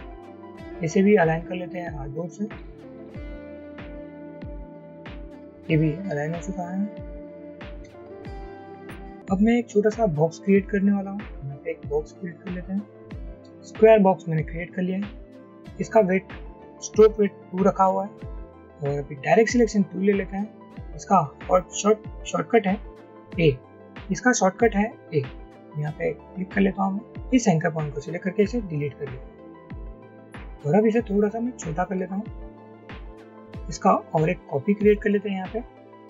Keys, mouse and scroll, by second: 8.3 Up, 11.8 shift+click, 28.5 Delete, 29.9 double click, 31.3 shift+click.